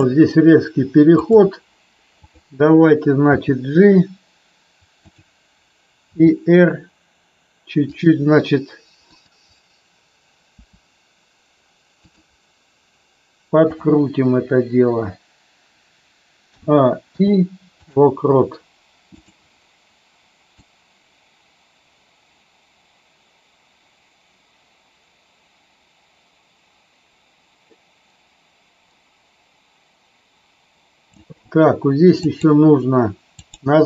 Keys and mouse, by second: 1.1 click, 3.2 g, 6.1 r, 7.8 click, 9.0 click, 10.6 r, 12.0 click, 16.5 a, 17.1 i, 20.6-31.1 drag, 32.1-32.5 drag, 33.2 click.